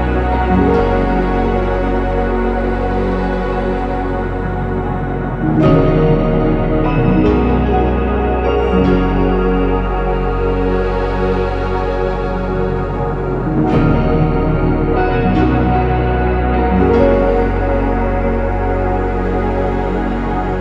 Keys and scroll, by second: 0.0-0.8 typing, 0.0 ctrl+z, 5.1-6.1 typing, 7.0 Escape, 9.1 Escape, 10.7 BackSpace, 11.0 BackSpace, 11.7 ctrl+z, 12.1 ctrl+z, 12.2 ctrl+z, 12.7 ctrl+z, 12.9 ctrl+z, 13.9 Return, 13.9 0, 16.2 ctrl+z, 16.2 ctrl+z, 16.4 ctrl+z, 16.8 Return, 17.8 ctrl+c, 17.8 ctrl+v, 20.4 Return.